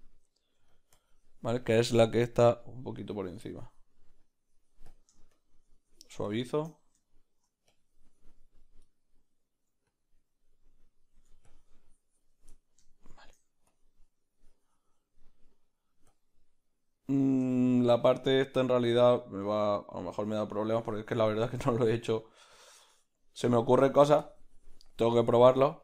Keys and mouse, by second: 0.0 middle click, 0.9-6.7 drag, 6.7 middle click, 7.7 click, 12.5-13.7 middle drag, 13.7 click, 15.2 middle click, 16.1 click, 16.9-18.6 middle drag, 18.6 click, 22.0 middle click, 22.5 click, 23.8 shift+middle click, 24.2 click, 25.4 middle click.